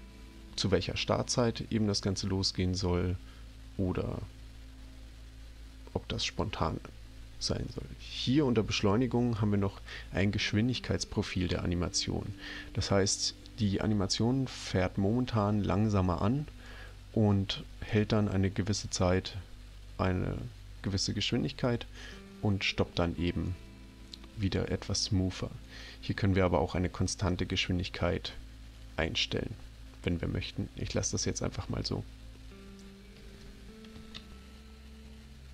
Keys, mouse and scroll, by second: 6.2 click, 30.8 click, 34.3 ctrl+alt+p.